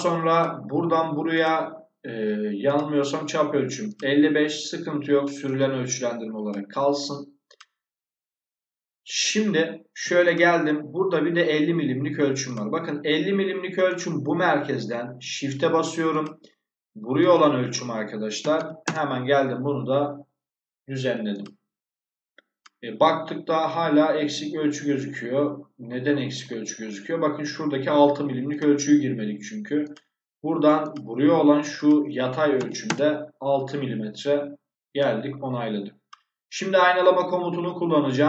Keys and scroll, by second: 18.3 5, 18.7 Return, 32.5 6, 32.7 Return.